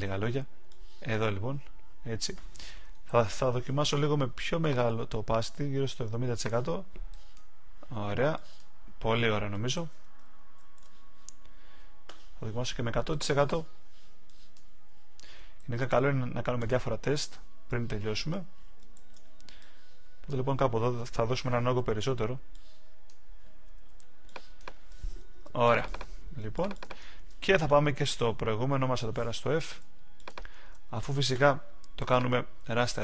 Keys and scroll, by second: 3.0 super+z, 9.7 super+z, 10.5 alt+super+z, 15.5 super+z, 18.9 super+z.